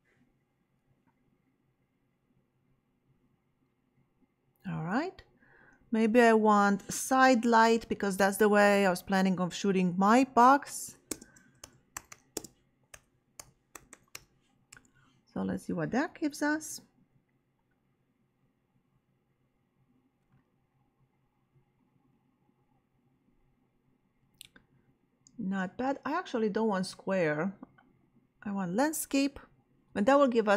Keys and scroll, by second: 10.8-14.6 typing, 14.7 Return.